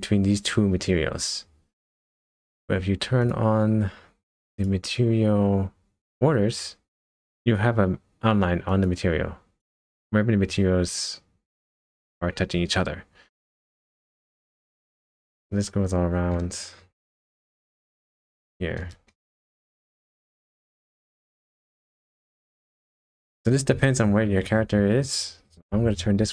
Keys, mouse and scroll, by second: 3.2 click, 4.5 click, 6.6 click, 8.7 click, 9.6 click, 13.4 middle click, 14.7 middle click, 15.0 KP_0, 15.0 scroll up 1, 15.4 middle click, 17.4 shift+middle click, 19.1 middle click, 20.7 scroll up 1, 20.8 scroll down 3, 21.4 middle click, 22.2 shift+middle click, 23.0 middle click, 23.8 shift+middle click, 26.2 KP_0.